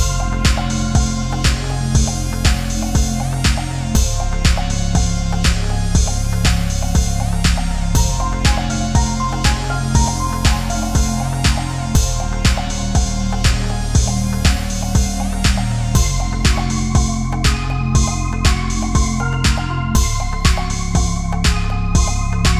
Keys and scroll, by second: 4.1 space, 4.8 space, 5.9 ctrl+z, 6.2 ctrl+=, 6.4 space, 8.6 space, 10.7 ctrl+z, 20.1 Left, 20.3 Right, 20.7 Down, 20.8 Left, 20.9 Down, 21.1 Left, 21.5 Down, 21.9 Right.